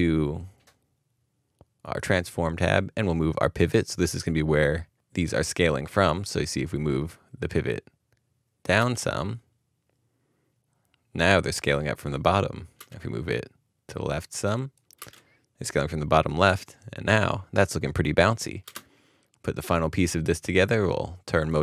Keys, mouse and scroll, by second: 8.7 space, 12.7 space, 13.0 space, 15.0 space, 18.6 space.